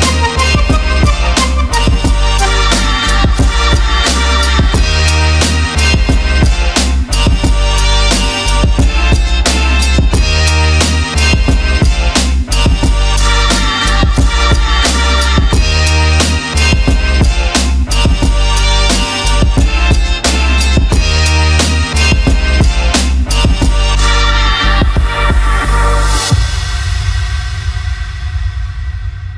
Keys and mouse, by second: 0.4 shift+middle drag, 0.9 ctrl+middle drag, 3.3 middle click, 4.5 shift+middle click, 4.8 ctrl+middle click, 5.1 middle click, 5.6 shift+middle click, 7.4 click, 7.7 middle click, 10.6 KP_Decimal, 12.1 click, 12.7 middle click, 13.5 middle click, 16.6 shift+click, 17.1 shift+click, 18.2 shift+click, 27.2 click.